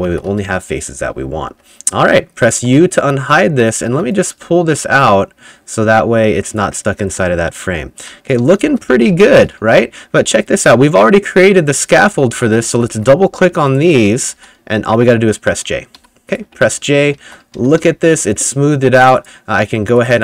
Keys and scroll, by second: 0.0-1.5 typing, 2.6 u, 3.2 s, 3.9 a, 7.1-10.6 typing, 7.8 Escape, 11.9-14.9 typing, 16.0-18.3 typing.